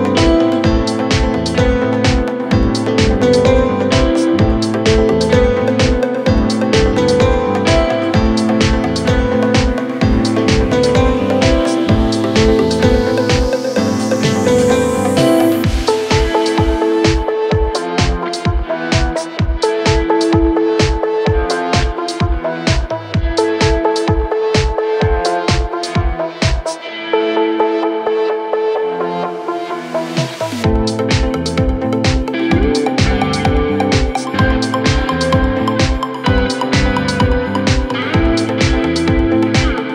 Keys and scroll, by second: 14.6 c, 16.1 F3, 22.4 space, 27.8 shift+Page_Down.